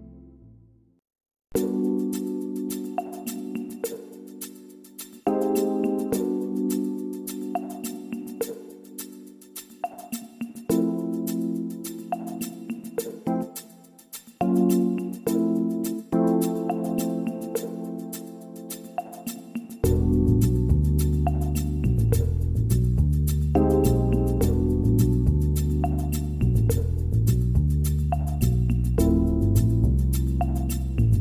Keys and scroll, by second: 28.9 ctrl+z.